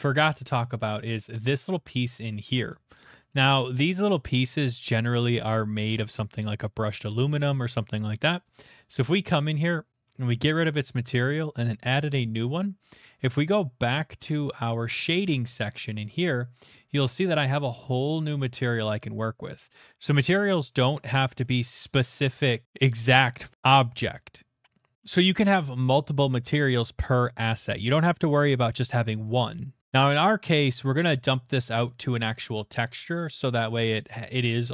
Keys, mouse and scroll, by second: 0.0 middle click, 0.2 middle click, 0.2 middle click, 0.3 middle click, 0.3 middle click, 0.3 shift+middle click, 0.8 middle click, 1.1 shift+middle click, 1.2 click, 1.6 shift+middle click, 2.3 middle click, 2.6 shift+middle click, 3.3 middle click, 8.5 click, 11.6 click, 14.7 click, 15.2-16.7 scroll, 17.3 click, 17.3 shift+middle click, 18.5 click, 18.9 scroll, 20.7 click, 20.7-21.2 scroll, 21.4 shift+middle click, 21.8 middle click, 22.0 middle click, 22.1 middle click, 29.8 click, 32.2-33.8 scroll.